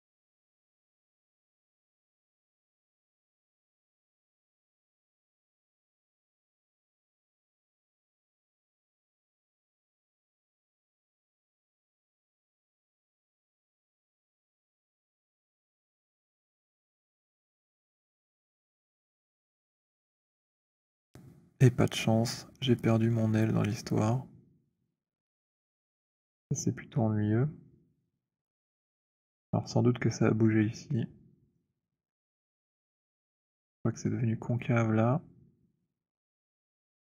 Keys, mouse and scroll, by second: 0.8 click, 3.3-7.3 typing, 6.4 middle click, 8.0 middle click, 9.4-12.6 typing, 12.1 middle click, 13.6 click, 15.7 right click, 16.3 click, 18.1-20.6 c, 28.0 alt+click, 29.0 alt+click, 29.0 alt+middle click, 31.7 alt+click, 33.5 alt+click, 36.6 middle click.